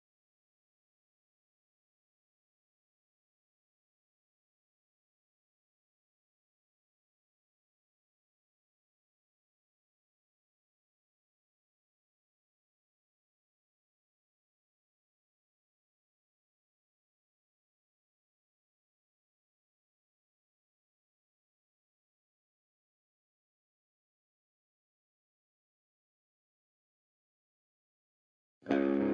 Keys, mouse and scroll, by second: 0.3 click, 0.4-3.6 typing, 1.1 click, 1.9 click, 2.7 click, 3.5 click, 4.4 click, 8.2 click, 8.5 shift+click, 8.7-9.7 shift+right drag, 9.7 click, 9.8 g, 10.3 click, 10.4 g, 11.0 click, 11.1 g, 11.9 click, 13.2 f, 13.9-14.3 scroll down 1, 14.5 shift+middle click, 14.9-15.3 scroll up 1, 15.3 click, 15.6 f, 15.9 click, 16.2 f, 16.6 ctrl+z, 17.0 click, 17.8 f, 18.2 click, 18.9 f, 19.3 drag, 19.9 f, 20.2 click, 20.8 f, 21.1 click, 21.3 f, 23.7 click, 23.8 f, 25.3 ctrl+z, 25.5-26.4 shift+scroll up 2, 25.7-26.4 shift+middle drag, 26.4 drag, 26.6 shift+click, 26.8-27.6 right drag, 27.6 click, 27.8-29.1 typing, 28.4 click.